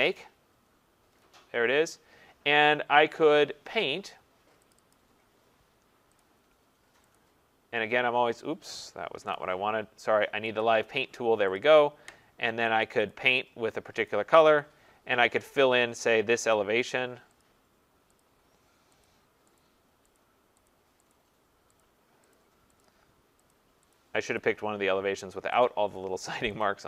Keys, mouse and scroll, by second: 0.0 click, 4.7 click, 4.9 click, 6.3 click, 7.2 click, 9.1 ctrl+z, 10.6 click, 11.6 click, 11.8 click, 13.2 click, 14.1 click, 16.5 click, 17.4 click, 18.2 click, 19.1 click, 19.6 click, 20.2 click, 20.7 click, 21.1 click, 21.9 click, 22.3 click, 22.8 click, 23.6 click, 23.9 click, 24.4 click, 25.6 click, 26.6 click.